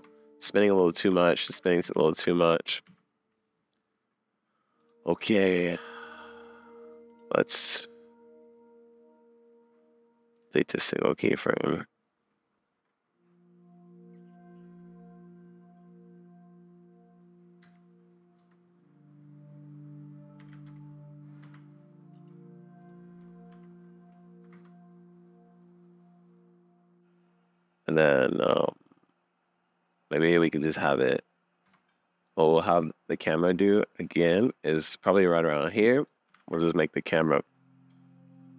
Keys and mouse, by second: 1.1 shift+Left, 1.5 super+s, 1.9 shift+Right, 2.7 Left, 2.9 Right, 23.5 shift+Left, 24.5 space, 31.7 space, 32.2 click, 36.4 super+s, 37.2 click.